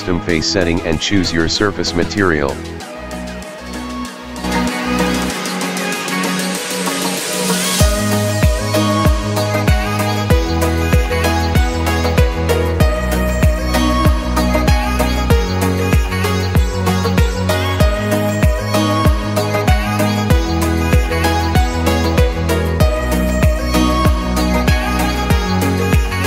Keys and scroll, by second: 3.3 o, 8.9 a, 9.4 w, 9.7 a, 9.9 w, 10.7 Escape.